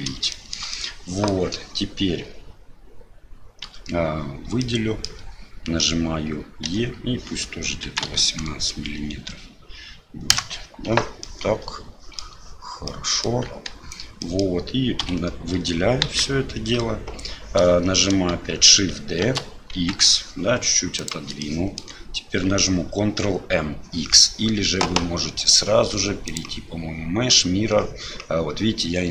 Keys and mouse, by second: 0.4 shift+middle click, 0.9 middle click, 3.6 a, 4.6 middle click, 6.6 e, 11.3 middle click, 13.0 middle click, 14.3 middle click, 15.0 a, 16.0 KP_1, 19.2 shift+d, 21.5 shift+click, 26.4-29.1 drag.